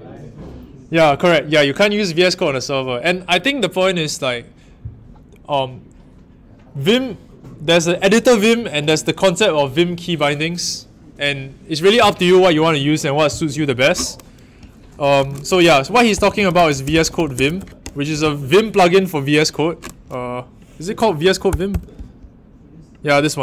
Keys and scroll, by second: 15.1 super+t, 15.3-18.8 typing, 21.2 Left, 21.4 BackSpace, 21.6 Return.